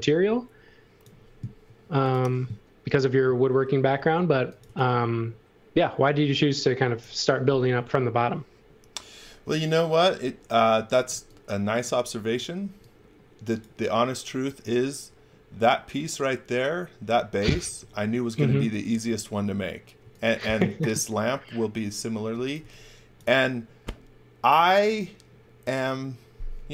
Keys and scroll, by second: 1.6 space, 4.3 x, 4.6 v, 10.7 x, 11.0 v, 12.6 x, 18.5 x, 18.9 v, 20.0-20.7 typing, 22.3 x, 22.5 v.